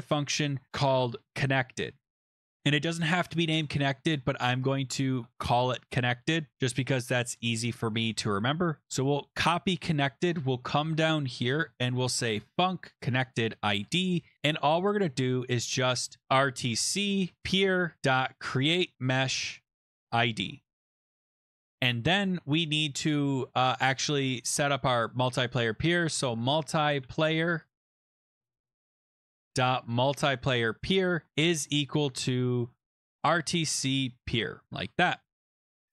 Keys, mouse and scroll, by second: 0.5-3.9 typing, 5.1 BackSpace, 5.3 BackSpace, 8.3 click, 8.8 ctrl+c, 9.1-9.6 scroll down 10, 9.9 scroll up 2, 10.0-10.4 scroll, 10.8 click, 11.3 Return, 11.5 Return, 11.8-13.6 typing, 13.8 Return, 16.0-20.8 typing, 20.9 Escape, 21.2 Down, 21.2 Right, 21.6 Up, 21.6 Left, 21.8 Return, 25.7-34.4 typing, 28.3-28.7 Down, 28.9 Tab, 34.7 ctrl+s.